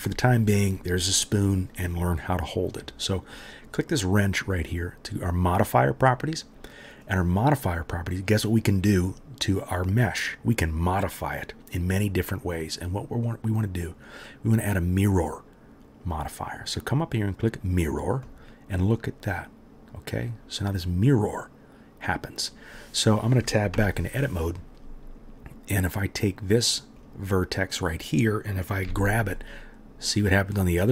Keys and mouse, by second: 5.0-7.1 right drag, 7.1-26.0 middle drag, 23.7 Tab, 26.9 middle click, 27.0-30.9 right drag, 28.8 g.